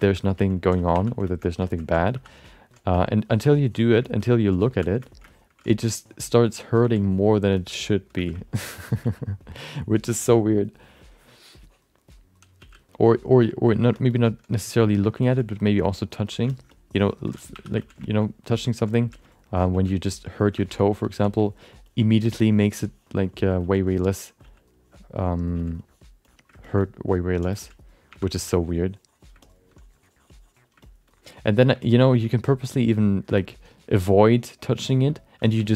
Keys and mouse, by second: 0.0 alt+shift+middle click, 0.1 middle click, 0.4 ctrl+alt+middle click, 0.9 1, 1.2 shift+middle click, 1.6 ctrl+alt+middle click, 2.1 2, 2.4 alt+middle click, 2.9 f, 3.2 click, 3.6 click, 4.0 alt+shift+middle click, 4.7 1, 5.0 alt+middle click, 5.3 alt+shift+middle click, 5.9 click, 6.3 click, 6.8 f, 7.1 shift+click, 7.6 shift+middle click, 7.8 alt+middle click, 8.1 f, 8.4 alt+middle click, 9.0 f, 9.3 click, 11.1 click, 11.5 click, 12.6 f, 12.9 click, 13.3 f, 13.6 click, 14.0 alt+shift+middle click, 14.5 click, 15.2 ctrl+alt+middle click, 15.4 alt+middle click, 15.6 shift+middle click, 15.9 ctrl+alt+middle click, 16.5 middle click, 16.7 alt+middle click, 17.0 ctrl+alt+middle click, 17.5 2, 17.8 f, 18.0 alt+shift+middle click, 18.2 alt+middle click, 18.5 ctrl+alt+middle click, 18.9 f, 19.2 alt+middle click, 19.7 f, 20.3 f, 20.6 alt+shift+middle click, 20.8 alt+middle click, 21.1 f, 21.8 ctrl+click, 22.2 ctrl+click, 22.6 f, 22.9 click, 23.3 click, 23.6 f, 23.9 click, 24.4 f, 24.7 click, 25.2 click, 25.5 f, 25.8 click, 26.2 click, 26.6 alt+shift+middle click, 26.8 alt+middle click, 27.5 f, 28.1 1, 28.5 f, 28.5 click, 29.4 alt+middle click, 29.7 click, 30.8 alt+middle click, 31.1 click, 31.8 alt+middle click, 32.1 f, 32.3 click, 33.3 alt+middle click, 33.6 click, 34.6 click, 34.9 alt+shift+middle click, 35.1 alt+middle click, 35.4 shift+middle click, 35.6 middle click.